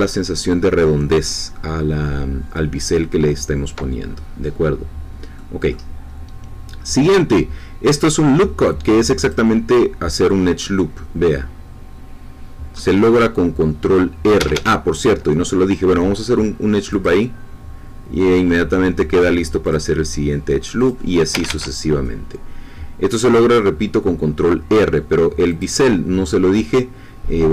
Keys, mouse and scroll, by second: 5.3 middle click, 9.2 click, 14.5 Escape, 16.9 click, 19.6 click, 20.8 click, 21.4 Escape, 25.4 click.